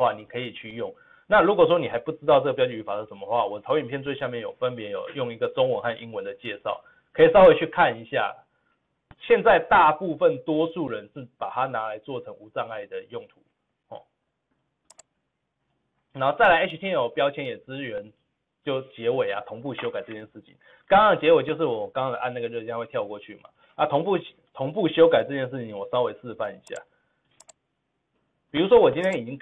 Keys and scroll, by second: 27.0 ctrl+v.